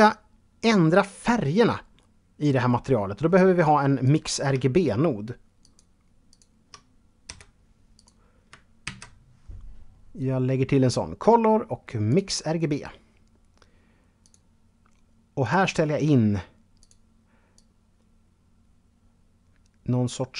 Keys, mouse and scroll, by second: 3.2 click, 4.8 shift+click, 5.5 shift+double click, 6.4 g, 7.1 click, 8.0 shift+a, 11.3 click, 13.4 click, 14.6 click, 16.0 click, 16.7 click.